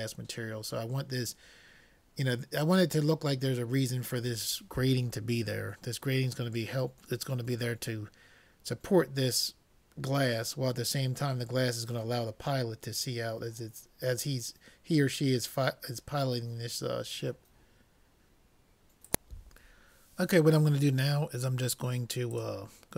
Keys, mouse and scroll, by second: 22.5-22.9 drag.